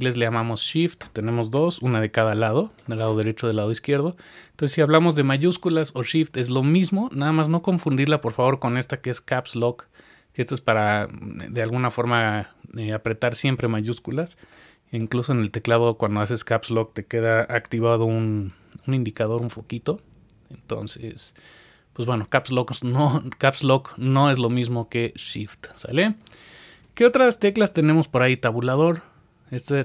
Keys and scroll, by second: 7.7 Caps_Lock, 15.8 Caps_Lock, 28.9 Tab.